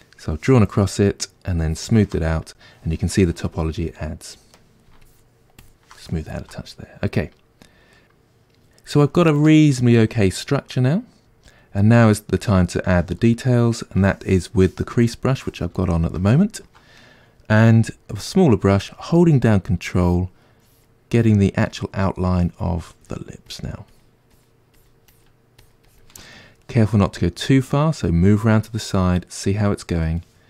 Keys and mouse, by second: 0.5 click, 1.7-3.6 shift+drag, 3.6-5.1 middle drag, 5.1-6.1 shift+drag, 6.1-19.9 ctrl+middle drag, 17.8 f, 19.9-26.6 ctrl+drag, 26.6-30.4 middle drag.